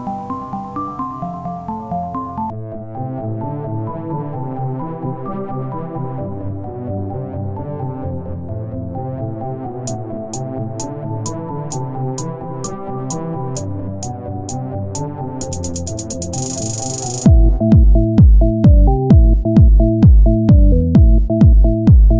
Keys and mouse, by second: 0.4 Tab, 2.5 Tab, 3.2 ctrl+Tab, 4.2 click, 5.8 s, 7.1 Tab, 9.1 Tab, 10.3 z, 12.5 ctrl+Tab, 13.1 z, 13.5 z, 13.7 c, 14.7 z, 14.9-16.0 middle drag, 16.0 click, 18.6 z, 20.0 r, 20.6 z, 21.4 right click, 22.0 Tab.